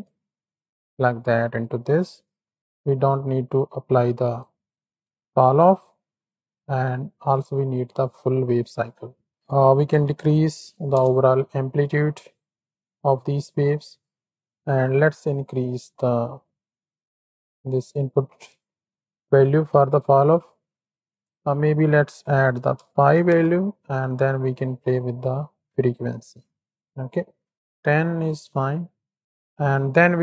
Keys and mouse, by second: 0.4-1.6 drag, 2.4 click, 2.5 middle click, 4.2 click, 5.0-5.5 middle drag, 7.2 click, 8.3-9.2 middle drag, 9.3-11.0 drag, 11.9-12.9 middle drag, 14.9-18.4 shift+drag, 19.0-19.5 middle drag, 21.2-23.4 drag, 24.9-27.5 shift+drag, 27.5 middle click, 28.5 KP_1, 29.2 ctrl+KP_3, 29.2 shift+click.